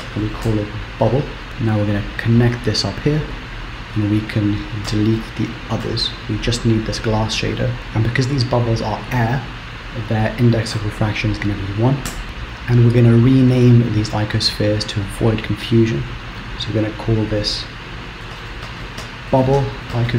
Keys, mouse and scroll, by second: 0.4 b, 1.6 click, 3.7 click, 5.1 x, 5.7 click, 6.0 x, 9.4 click, 12.4-14.2 scroll down 1, 14.2 click, 14.9-16.6 scroll up 15, 16.6 click, 19.0 b.